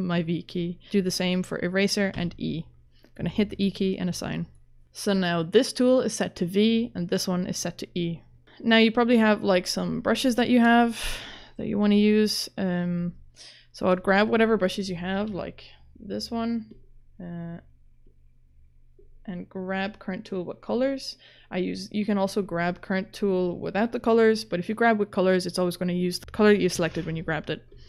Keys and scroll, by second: 2.2 e, 15.3 ctrl+z.